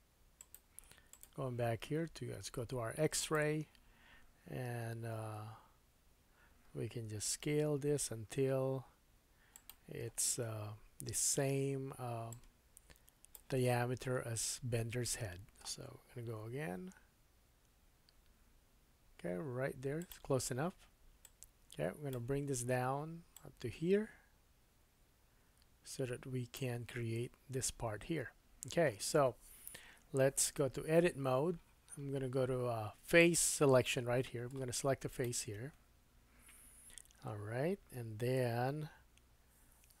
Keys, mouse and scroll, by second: 0.4 click, 0.5 middle click, 1.1 click, 1.2-3.2 middle drag, 3.2-9.7 drag, 7.3 s, 9.7-12.3 middle drag, 12.3-20.1 drag, 13.6-14.6 scroll up 6, 14.6-15.1 scroll down 1, 15.1 shift+middle click, 16.4 s, 20.1-21.2 middle drag, 21.2-24.2 drag, 22.5-23.3 scroll down 2, 30.6 Tab, 33.2 click, 33.8 middle click, 35.1 click, 35.2-40.0 middle drag.